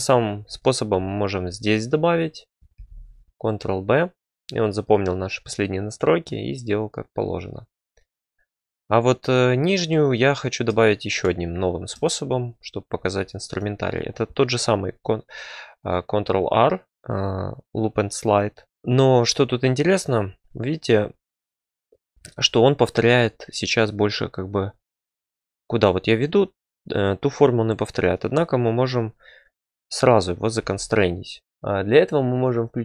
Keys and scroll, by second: 2.7 ctrl+b, 16.9 ctrl+r, 30.6 e, 31.5 f.